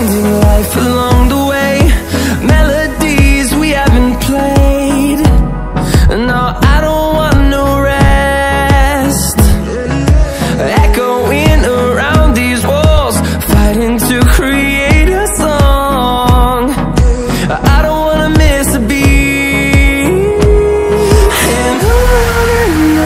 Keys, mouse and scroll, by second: 5.8 Down, 7.3 Up, 11.0 click, 11.5 Down, 13.7 Up, 15.1 click, 16.2 ctrl+scroll down 1, 17.0 click, 17.8 ctrl+alt+scroll up 1, 19.4-23.0 drag.